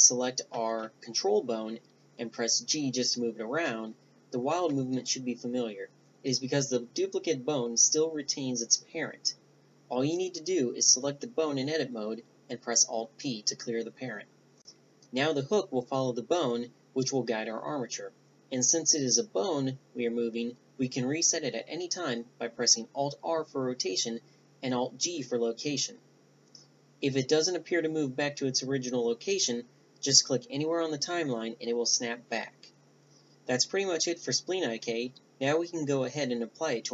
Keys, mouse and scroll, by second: 0.9 alt+g, 2.3 alt+r, 3.0 alt+g, 4.5-6.3 middle drag, 6.3 ctrl+z, 6.7 ctrl+z, 7.2 ctrl+z, 7.5 ctrl+z, 9.6-10.9 drag, 11.0-13.4 right drag, 11.5-13.4 drag, 13.0 alt+p, 13.4 Tab, 13.5 a, 13.6 right click, 14.0 alt+p, 15.1 Tab, 15.7 a, 16.1 right click, 17.9 middle click, 19.5 g, 27.4 alt+g, 29.0-29.8 middle drag, 29.8-31.3 drag, 32.2-33.9 middle drag, 34.0-36.9 drag.